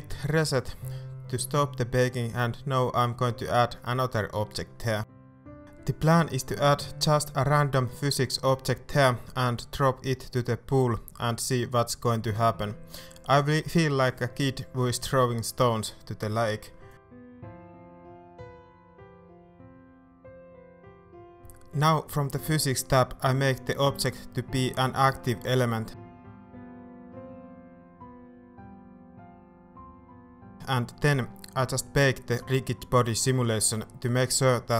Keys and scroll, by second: 13.6 Tab, 14.2 Tab, 14.4 Tab, 15.3 r, 15.5 Tab, 16.8 Tab, 18.0 shift+Tab, 28.7 space.